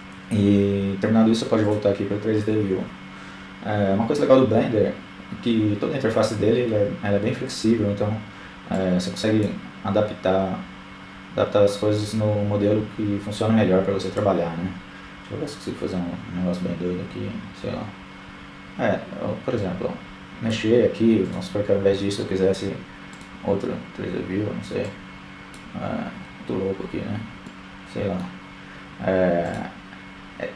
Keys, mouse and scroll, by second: 7.0-8.3 drag, 10.2-11.5 drag, 18.1-19.2 drag, 19.5-20.8 drag, 23.3-24.5 drag, 24.2-28.8 middle drag, 28.8 click, 29.3-30.5 drag.